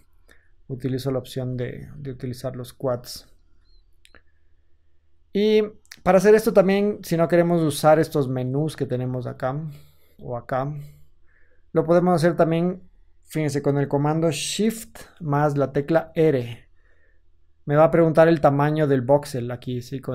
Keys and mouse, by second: 1.3 ctrl+z, 1.8 ctrl+z, 2.8 ctrl+z, 3.5 ctrl+z, 5.0-9.3 drag, 9.3-16.3 middle drag, 16.3 shift+r.